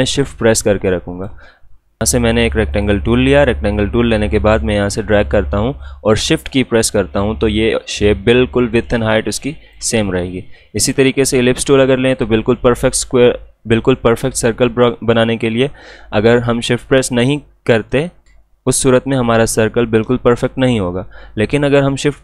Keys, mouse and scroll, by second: 2.7-10.8 drag, 10.8 right click, 11.5 click, 15.1-21.2 drag.